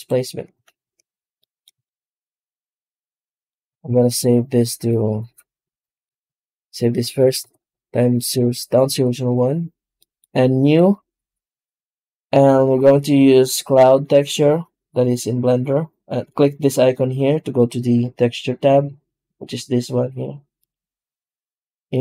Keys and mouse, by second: 0.6 shift+z, 1.3 middle drag, 1.7-3.4 shift+middle drag, 3.8 ctrl+s, 9.9 middle click, 21.8-22.0 drag.